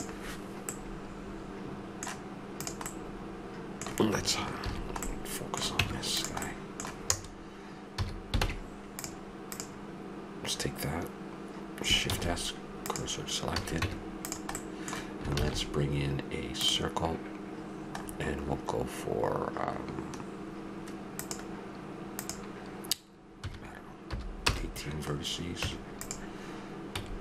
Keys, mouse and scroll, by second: 0.7-2.6 middle drag, 2.9 right drag, 3.0-3.6 middle drag, 4.6 shift+h, 5.1-6.6 middle drag, 5.8 Tab, 7.9 a, 8.4 ctrl+Tab, 9.5 click, 12.1 shift+s, 13.6 a, 13.8 Tab, 14.7-16.6 drag, 15.3 shift+a, 21.1-24.0 drag, 25.6 Tab, 26.9 s.